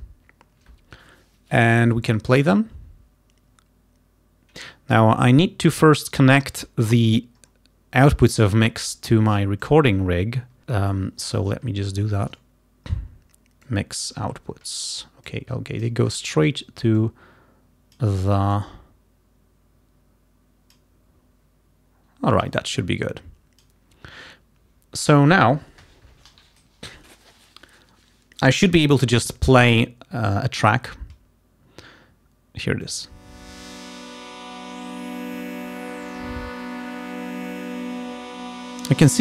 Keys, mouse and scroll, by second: 9.7 click, 11.0 click, 11.9 scroll up 1, 12.4 scroll down 1, 13.7 click, 14.4-14.7 scroll down 1, 15.3 click, 17.0-18.2 drag, 18.6-21.0 drag, 22.4-23.9 drag, 32.8 click.